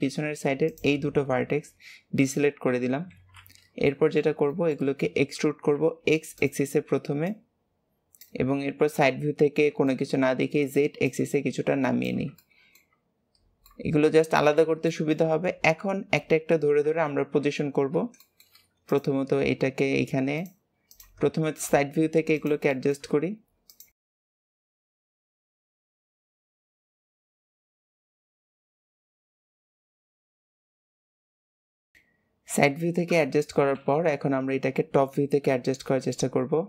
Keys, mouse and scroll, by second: 0.6 shift+click, 1.3-2.0 scroll down 3, 2.6 KP_7, 3.0 alt+z, 3.8-5.0 shift+middle drag, 5.0-5.7 scroll up 2, 5.7 e, 7.2 click, 8.8 KP_3, 9.8-10.9 shift+middle drag, 10.9 click, 12.3 shift+middle click, 12.9-13.3 scroll up 2, 13.6 middle click, 14.2 alt+z, 14.8-16.8 shift+middle drag, 16.8 KP_3, 17.6-18.8 middle drag, 17.6-18.1 scroll up 4, 18.8 click, 20.8 click, 22.7 shift+middle click, 23.6 click, 24.3 shift+middle click, 24.5 click, 25.2 shift+middle click, 26.0 click, 26.5 shift+middle click, 26.9 click, 27.3 shift+middle click, 27.7 click, 28.4 shift+middle click, 28.7 click, 29.3 shift+middle click, 29.6 click, 30.9 shift+middle click, 31.2 click, 31.3 g, 32.2-33.7 scroll down 1, 33.7 KP_7, 34.4-35.3 scroll down 3, 35.3 scroll up 1, 35.7 shift+middle click, 36.2-36.6 scroll up 4.